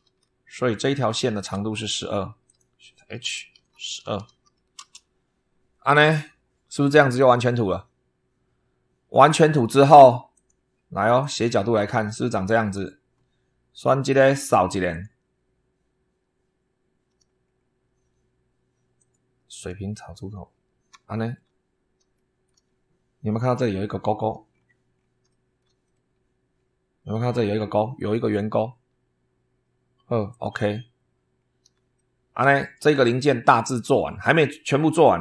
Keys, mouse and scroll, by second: 0.5 scroll down 2, 1.0 shift+middle click, 2.3 click, 3.2-4.7 typing, 5.9 scroll up 2, 9.4 click, 10.2 click, 11.1 click, 12.2 shift+middle click, 13.6 click, 14.8 click, 17.1-17.6 scroll down 1, 18.8 click, 19.4 click, 20.4-20.8 scroll up 1, 20.9 shift+middle click, 21.5 shift+scroll up 1, 22.0 shift+middle click, 22.5-22.8 shift+scroll up 1, 23.6 middle click, 24.4-25.1 scroll down 2, 25.2 shift+click, 25.7-26.6 shift+scroll up 4, 30.2 click, 31.2 scroll down 2, 31.5 scroll up 3, 31.8 shift+middle click, 32.5 shift+middle click, 32.8-34.0 drag.